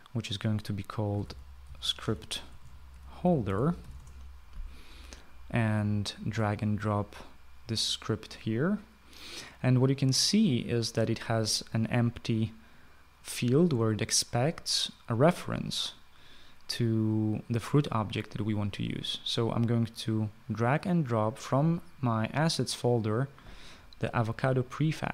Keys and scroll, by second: 1.3-4.8 typing.